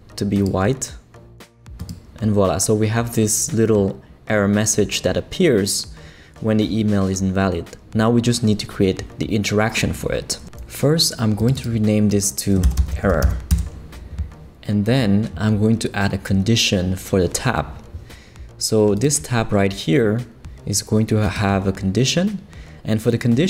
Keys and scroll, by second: 12.8 shift+r, 13.1 o, 13.5 Return.